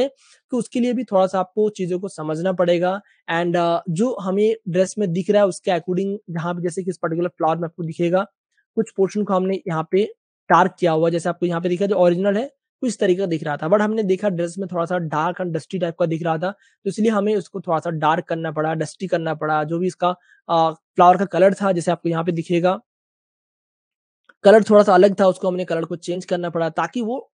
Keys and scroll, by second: 4.6 space, 5.8-6.8 typing, 10.9 typing, 21.9 space, 27.2 super+w.